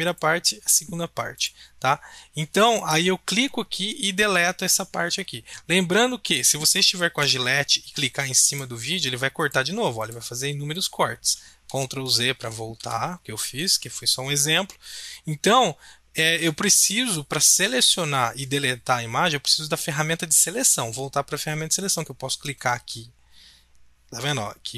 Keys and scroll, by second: 7.2 b, 11.6 ctrl+z, 12.0 ctrl+z, 12.4 ctrl+z, 12.8 ctrl+z.